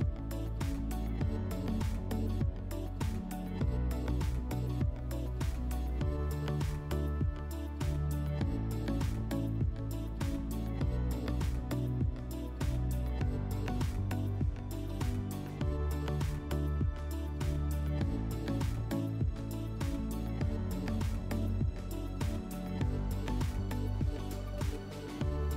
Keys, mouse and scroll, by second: 2.9 click, 4.6 click, 16.2 click, 17.5 click, 20.1 click, 22.5 click, 23.6 middle click.